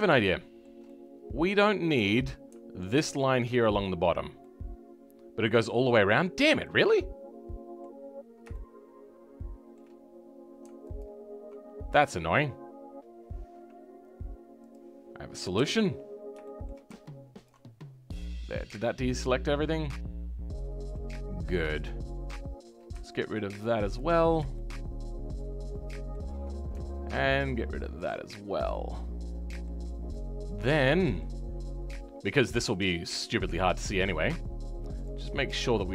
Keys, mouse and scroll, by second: 3.1 alt+click, 4.0 scroll down 2, 4.4-5.6 middle drag, 5.6 scroll down 2, 6.6-8.0 middle drag, 8.0-8.5 scroll up 2, 8.5-10.9 shift+middle drag, 10.9 alt+click, 13.1-14.6 scroll down 1, 14.6 click, 15.5 KP_7, 15.9-16.4 scroll down 2, 16.4-17.4 shift+middle drag, 17.4 ctrl+click, 17.7-18.1 scroll up 2, 18.1-19.2 middle drag, 19.2-19.6 scroll up 2, 19.6-21.1 middle drag, 21.1-21.7 scroll up 4, 21.7-23.9 shift+middle drag, 23.9 ctrl+click, 24.5-27.9 shift+middle drag, 27.9 ctrl+click, 28.2-29.8 middle drag, 29.8 scroll up 2, 30.1-34.9 middle drag, 34.9 click, 35.2-35.6 scroll down 3, 35.6-35.9 middle drag.